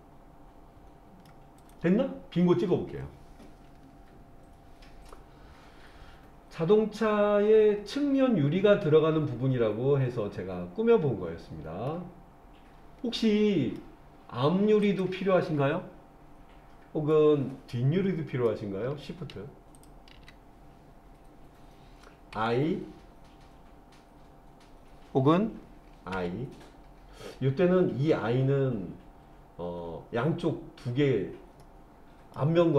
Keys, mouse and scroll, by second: 1.6 click, 3.4-7.9 middle drag, 11.9-13.8 middle drag, 14.8 click, 17.1-18.5 middle drag, 19.8 shift+click, 22.3 i, 26.2 i, 31.6 middle click.